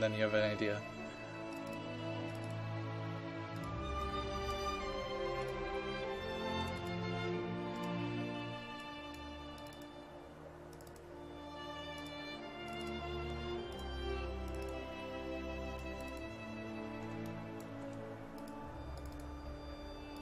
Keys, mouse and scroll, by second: 5.8-6.6 scroll down 1, 6.6-12.8 drag, 15.0-15.8 scroll down 1, 15.8 click, 17.3 ctrl+click, 18.4 click.